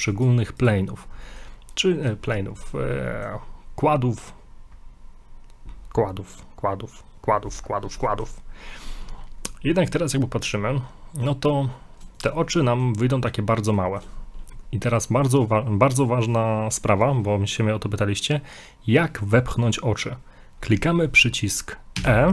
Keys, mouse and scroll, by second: 0.1 right click, 1.2 middle click, 1.5 scroll up 1, 1.9 shift+middle click, 3.1 middle click, 7.3-7.8 scroll up 3, 7.8 scroll down 2, 8.1 middle click, 9.8 middle click, 11.2 right click, 12.2 shift+right click, 12.4 shift+right click, 12.5 middle click, 13.1 middle click, 13.9 shift+middle click, 22.0 e.